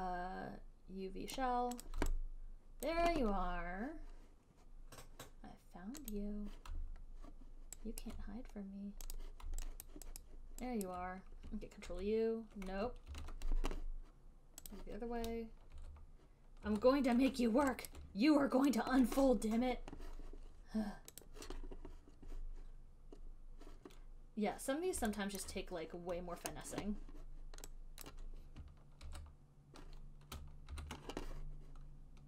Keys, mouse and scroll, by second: 1.6 right click, 2.1 right click, 3.1 alt+click, 6.4 click, 8.3 alt+right click, 9.5 click, 10.1 alt+right click, 10.5 alt+right click, 11.3 alt+right click, 12.1 ctrl+u, 13.1 alt+click, 13.5 ctrl+z, 15.0 alt+right click, 15.0 click, 16.0 ctrl+u, 17.0 ctrl+u, 18.2 alt+right click, 19.1 click, 21.5 click, 24.2 click, 25.8 alt+middle click, 28.4 click, 29.3 ctrl+u, 31.0 ctrl+z.